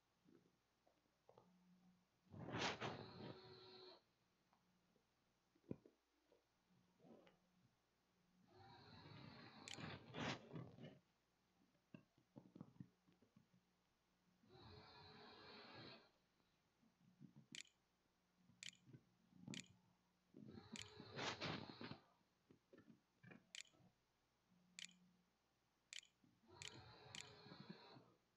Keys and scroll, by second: 8.0-9.6 typing, 11.2-12.1 typing, 16.1-26.9 typing.